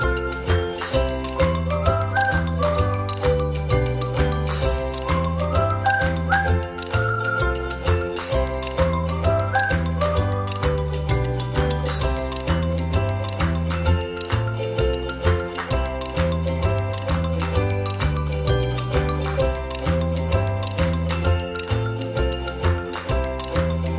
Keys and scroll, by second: 0.5 space, 3.2 space, 4.0 space, 13.3 ctrl+z, 18.6 ctrl+c, 18.8 ctrl+f, 19.7 space.